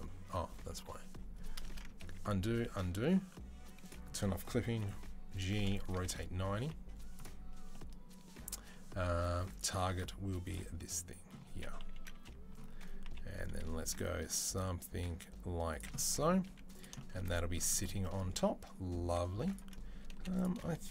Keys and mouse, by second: 1.9 ctrl+z, 2.5 ctrl+z, 3.6 click, 3.7-20.9 middle drag, 4.7 g, 5.5 r, 6.4 g, 11.6 KP_3, 12.9 g, 16.3 z, 18.9 2, 19.9 3.